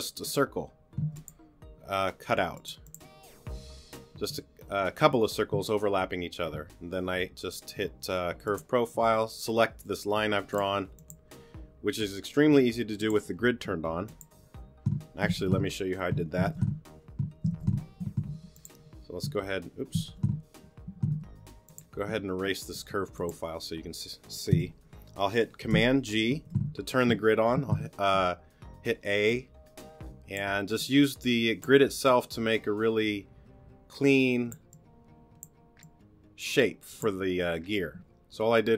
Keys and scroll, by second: 1.0 t, 12.5 t, 15.4 super+z, 18.6 r, 20.1 super+z, 22.1 t, 24.5 BackSpace, 27.5 super+a, 28.5 a.